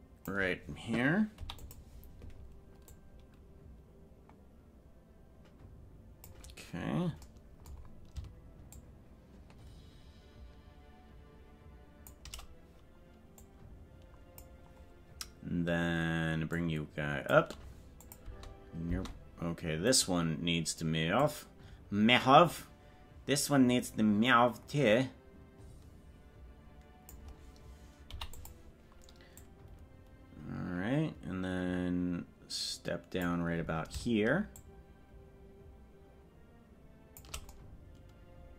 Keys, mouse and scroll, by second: 2.9-6.3 drag, 6.7-7.3 scroll down 3, 8.7-12.1 shift+drag, 13.4-14.5 drag, 16.5 click, 18.1 click, 18.2 space, 19.0 space, 20.2 right click, 21.2-27.2 drag, 29.4-33.3 drag, 34.5-37.2 shift+drag.